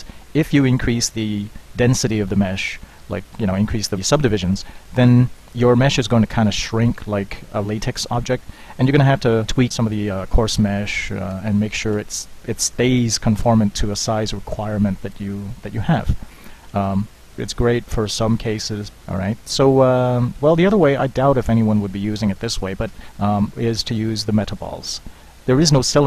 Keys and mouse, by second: 16.7 Tab, 22.9 shift+a.